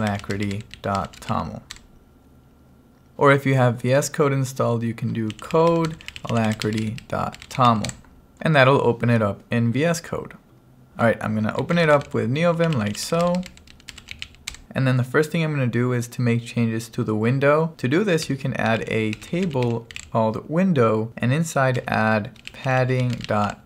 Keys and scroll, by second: 0.0-1.8 typing, 1.8 Return, 5.1-8.0 typing, 10.9-14.2 typing, 14.6 Return, 18.0-20.6 typing, 21.8-23.6 typing.